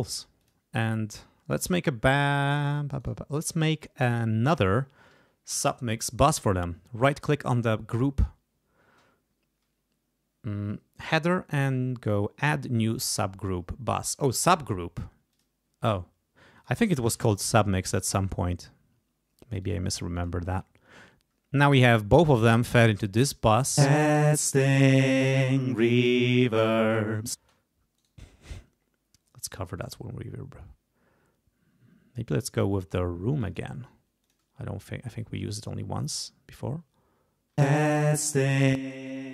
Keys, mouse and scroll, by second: 0.4 click, 1.6 click, 2.1 click, 3.0 right click, 3.5 click, 5.5 ctrl+s, 7.0 right click, 15.3 click, 16.6 click, 17.5 ctrl+Up, 19.6 click, 20.1 click, 22.8 click, 23.8 space, 27.4 space, 28.0 right click, 29.8 click, 33.3 click, 34.2 click, 35.4-36.4 drag, 37.6 space, 38.7 click.